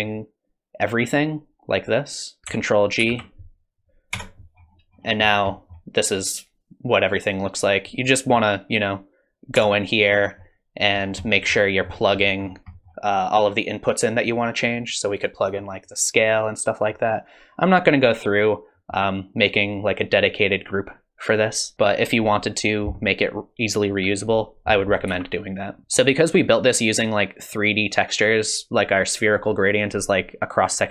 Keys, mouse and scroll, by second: 0.0 click, 3.1 ctrl+g, 4.1 Tab, 4.6-6.1 scroll up 17, 5.5 middle click, 9.6 Tab, 10.1-11.8 scroll down 10, 11.2 middle click, 11.8 middle click, 11.8-12.7 scroll up 13, 12.7 middle click, 15.4 click, 15.8 click, 25.1 ctrl+z, 25.8-27.9 scroll up 3, 27.9-28.4 scroll down 2.